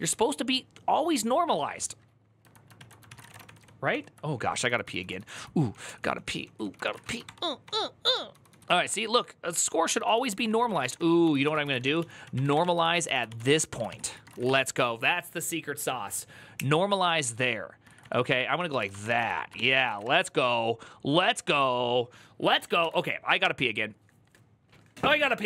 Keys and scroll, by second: 2.6 ctrl+n, 2.7-14.7 typing, 7.4 ctrl+d, 16.4-20.3 typing.